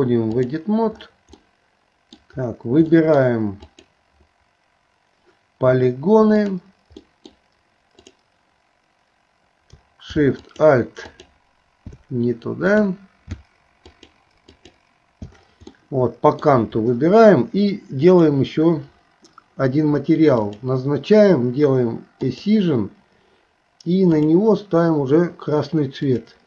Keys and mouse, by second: 1.4 middle click, 3.0 middle click, 3.7 click, 6.4 click, 7.0 middle click, 8.0 click, 10.4 alt+shift+click, 11.1 alt+shift+click, 13.9 alt+shift+click, 14.6 alt+shift+click, 15.7 middle click, 18.1 click, 20.4 click, 22.2 click, 24.2 click, 26.0 click.